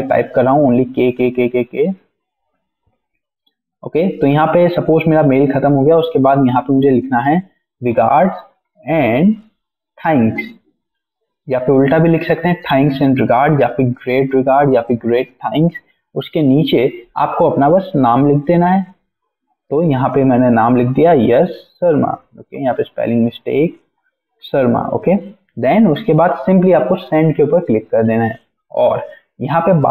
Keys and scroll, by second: 2.3 Return, 2.5 k, 2.6 Return, 3.4 k, 3.7 Return, 5.2-10.7 typing, 15.8 Return, 17.8-21.7 typing, 22.9-24.0 typing.